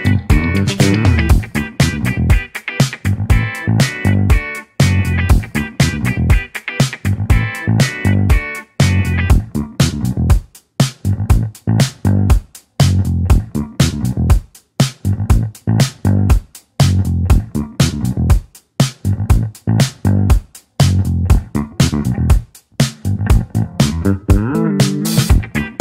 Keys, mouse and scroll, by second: 15.2-19.3 drag, 20.0-24.9 drag, 24.9-25.8 scroll down 2.